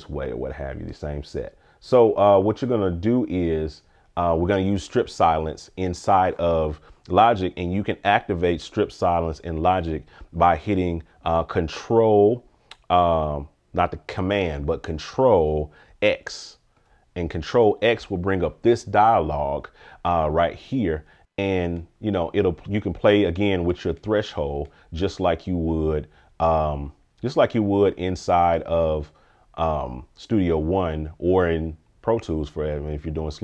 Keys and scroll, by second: 16.8 ctrl+x.